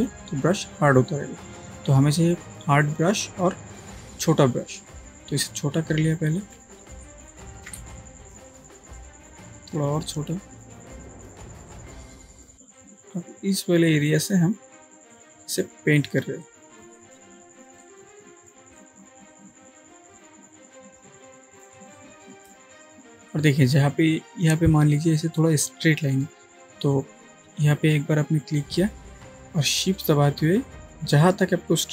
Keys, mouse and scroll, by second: 3.6-6.9 right drag, 7.0 ctrl+space, 7.3 ctrl+click, 7.6-7.9 ctrl+space, 7.9-8.6 click, 9.1-10.3 alt+right drag, 11.7-12.6 drag, 21.8 space, 21.9-22.6 drag, 29.1 click.